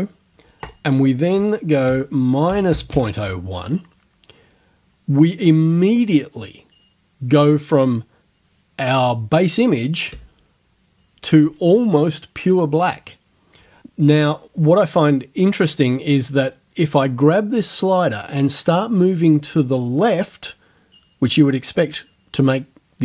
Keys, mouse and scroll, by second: 0.7 right click, 1.9 KP_Subtract, 2.7 KP_0, 2.9 KP_1, 10.1 KP_Enter.